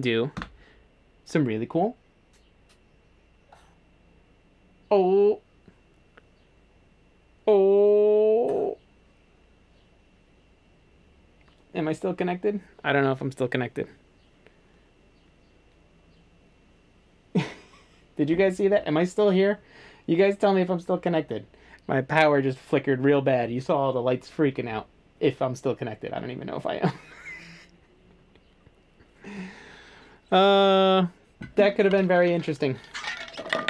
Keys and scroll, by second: 0.4 Delete.